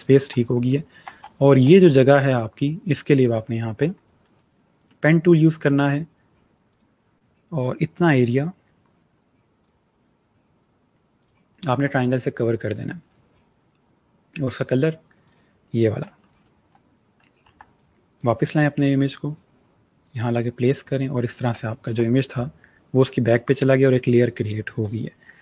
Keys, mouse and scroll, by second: 0.3 alt+scroll up 1, 1.0 scroll up 1, 1.1 space, 1.1 click, 3.3-4.5 alt+scroll down 2, 4.6 click, 6.6 click, 14.5 click, 16.1-16.7 alt+scroll down 1, 16.7-17.4 scroll down 1, 17.4 v, 17.6 click, 21.4 space.